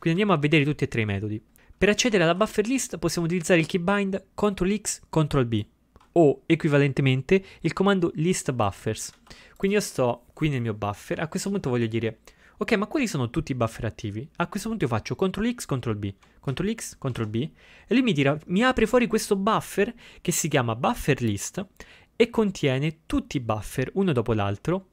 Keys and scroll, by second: 16.6 ctrl+x, 17.2 ctrl+b.